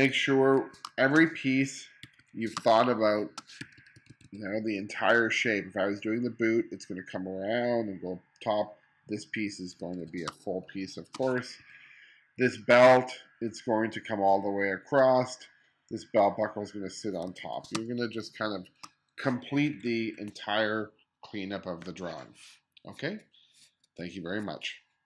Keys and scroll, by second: 0.1 1, 0.9 space, 2.1 1, 2.6 space, 3.7 2, 9.9 1, 10.3 space, 11.6 2, 12.5 2, 17.3 1, 17.8 space, 19.6 1.